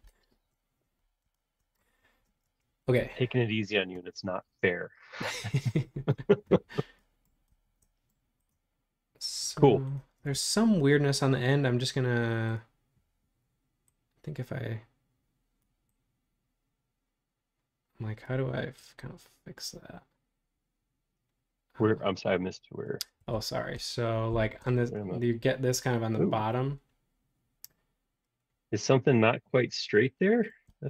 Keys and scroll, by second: 2.2 space.